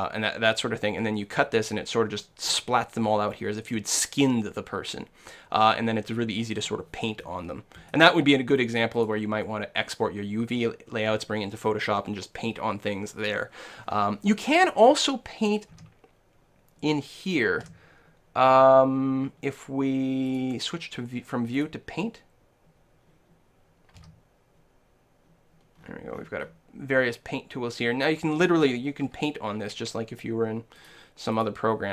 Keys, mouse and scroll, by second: 7.2-9.0 middle drag, 9.0-10.9 drag, 15.7 n, 17.7 n, 20.3-22.1 drag, 24.0 n, 25.8-29.1 middle drag, 29.1 n, 30.8-31.9 drag.